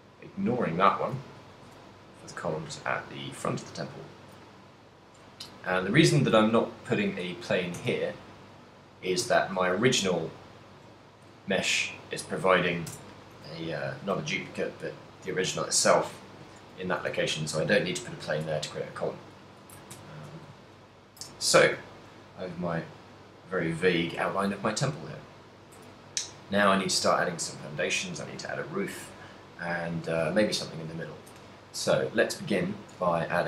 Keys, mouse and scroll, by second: 1.6 shift+d, 4.9 click, 5.8 shift+middle click, 6.6 ctrl+middle click, 7.4 a, 8.1 a, 9.4 z, 9.6 z, 10.4 middle click, 11.2 shift+middle click, 11.5 z, 12.2 middle click, 13.1 Tab, 13.6 a, 14.2 right click, 14.4 g, 15.5 right click, 16.6 middle click, 17.2 a, 20.0 KP_1, 20.9 ctrl+middle click, 21.6 shift+middle click, 22.1 ctrl+middle click, 22.2 middle click, 27.2 middle click, 33.0-33.4 typing.